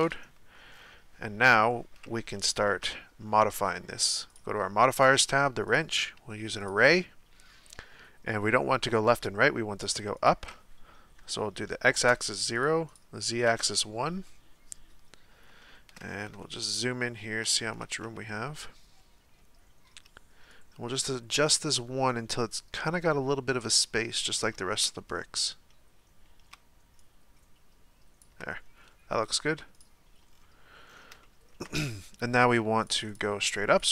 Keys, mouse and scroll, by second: 0.0 KP_Decimal, 0.7-1.7 scroll down 3, 1.7-4.3 shift+middle drag, 4.3 click, 5.7 click, 6.7-8.7 drag, 10.2-12.6 drag, 12.9-14.2 drag, 14.2-15.6 scroll up 4, 15.6 shift+middle click, 16.1-16.4 scroll up 4, 16.4-20.5 shift+middle drag, 20.5-23.6 shift+drag, 24.8-27.0 scroll up 4, 27.0-29.8 shift+drag, 30.3-30.9 scroll down 1, 30.9-31.2 scroll down 5, 31.2-32.8 shift+middle drag, 32.8-33.9 drag.